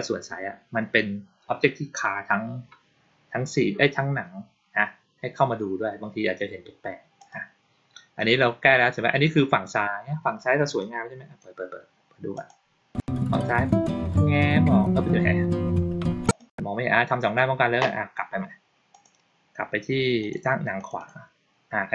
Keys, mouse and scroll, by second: 7.0 click, 10.6-11.2 drag, 12.2 click, 16.1 click, 18.8 click, 20.1 click, 20.7 click, 20.9 click.